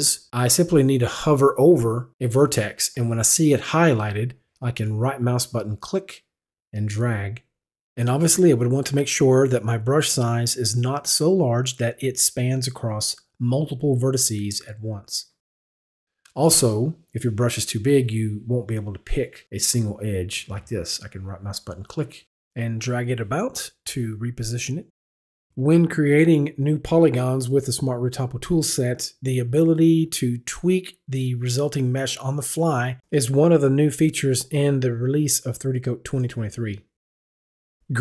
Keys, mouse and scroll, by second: 5.9 right click, 8.7 right click, 10.5-11.0 scroll down 1, 11.0-11.4 scroll up 1, 11.6-12.5 scroll up 1, 12.6-13.0 scroll up 1, 13.4 scroll up 1, 16.3-17.2 scroll down 1, 17.3-17.7 scroll down 1, 21.6 right click, 28.8 right click, 29.8 right click, 30.5 right click, 31.4 right click, 32.5 right click, 33.3 right click, 33.9 right click, 34.5 right click, 35.4 right click, 36.2 right click, 37.1 right click.